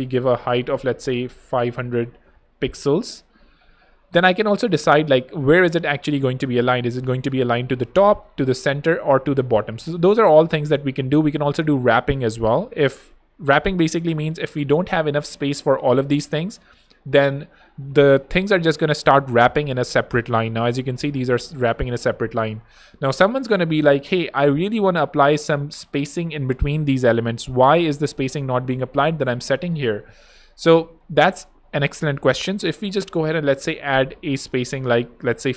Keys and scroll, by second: 0.8-3.2 typing, 17.6 super+d, 32.5 super+a, 33.2 super+5, 33.4 0, 33.5 Home.